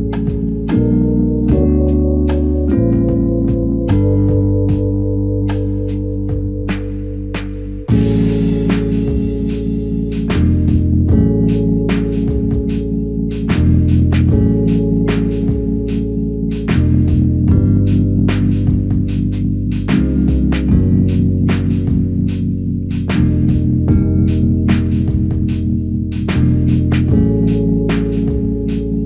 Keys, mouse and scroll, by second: 0.1 double click.